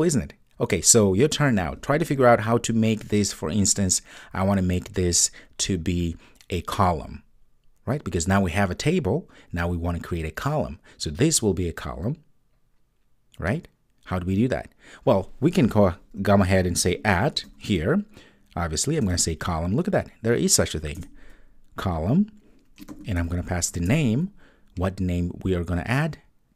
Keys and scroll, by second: 21.0 Return.